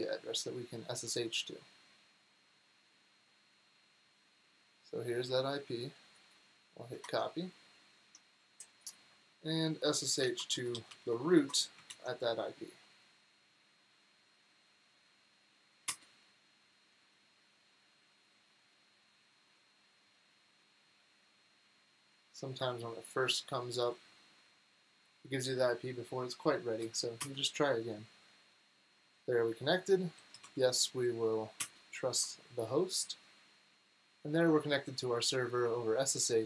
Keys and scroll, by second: 7.0 super+Tab, 9.6-11.8 typing, 11.9 super+v, 15.9 Return, 26.8 Up, 27.2 Return, 29.9-30.9 typing, 31.6 Return.